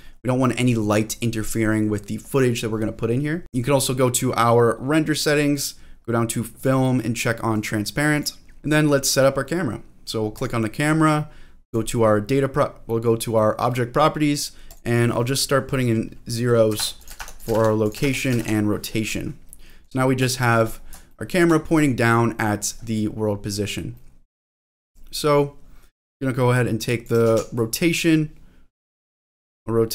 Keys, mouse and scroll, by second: 0.1-0.9 scroll up 2, 0.9-2.1 scroll down 1, 2.1-2.9 scroll down 1, 3.4 click, 5.5-6.1 scroll down 1, 6.1 scroll down 1, 6.5 click, 7.5 click, 8.1 click, 8.6-9.6 scroll down 3, 10.3 click, 11.6 click, 14.7-16.8 drag, 17.0 click, 17.3 click, 17.8 click, 18.2 click, 19.5 middle click, 20.0-20.3 scroll up 2, 20.3 shift+middle click, 20.8-21.1 scroll up 2, 21.1 shift+middle click, 22.0 middle click, 22.8-23.4 scroll down 1, 23.6 scroll down 1, 24.1 middle click, 24.5 shift+middle click, 24.9 middle click, 26.5 click, 27.2 ctrl+z, 27.6-28.8 drag, 29.1 ctrl+z, 29.4-29.9 drag.